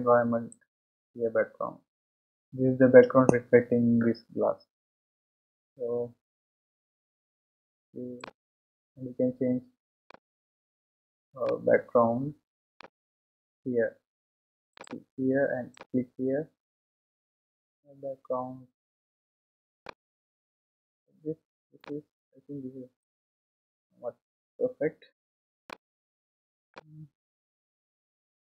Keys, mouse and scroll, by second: 0.6-2.4 drag, 11.4-19.8 middle drag, 19.8 click, 21.3-21.9 scroll down 1, 21.9-24.9 middle drag, 26.1-26.8 scroll up 3, 26.8-28.4 middle drag.